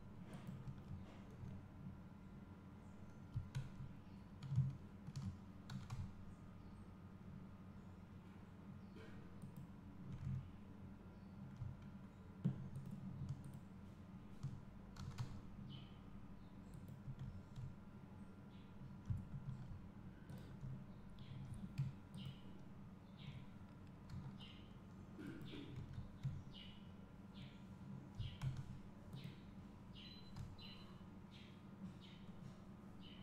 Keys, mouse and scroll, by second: 0.7 click, 2.4 `, 4.0 Tab, 6.0 g, 9.8 click, 12.4 `, 13.6 ctrl+click, 15.4 g, 17.4 Tab, 20.4-23.0 drag, 24.4 g, 25.9 click, 26.8 `, 29.3-30.3 drag, 30.7 g.